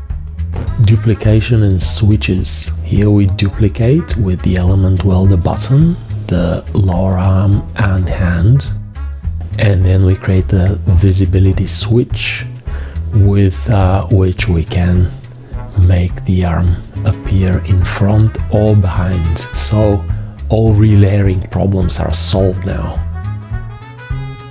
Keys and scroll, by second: 0.8 g, 2.2 F1, 2.4 v, 7.5 F1, 10.6 F1, 13.7 v, 15.0 F1, 17.6 F1, 21.0 F1, 23.2 F1.